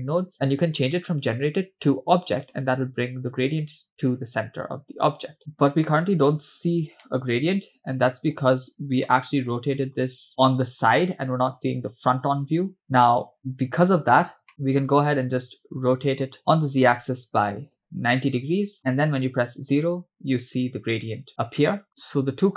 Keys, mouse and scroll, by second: 1.9-3.0 drag, 5.4 ctrl+shift+click, 7.1-8.3 middle drag, 8.7-9.7 scroll up 2, 9.1-9.7 middle drag, 14.5 middle click, 14.5-16.4 scroll up 5, 16.7-17.9 drag, 19.2 KP_0, 21.9 middle click, 21.9 scroll down 3.